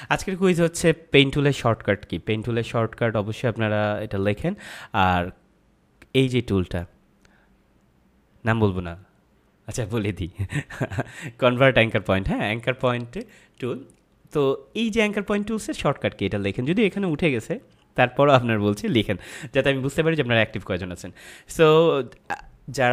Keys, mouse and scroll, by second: 13.1 click.